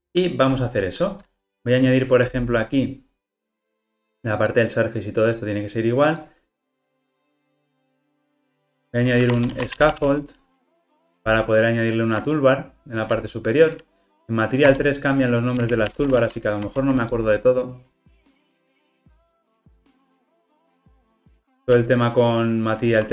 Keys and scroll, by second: 11.3 Return, 21.4 alt+Return.